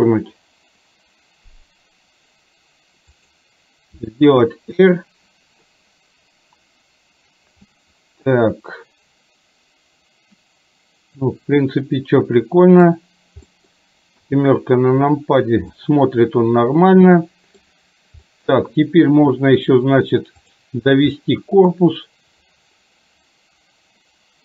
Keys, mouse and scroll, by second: 4.0 r, 7.8-13.0 middle drag, 13.5 scroll up 1, 14.3 KP_7, 15.8-17.3 scroll up 1, 17.3-17.8 middle drag, 18.3-18.6 scroll up 1, 18.6-20.5 scroll down 1, 20.5 click, 21.3-21.8 middle drag.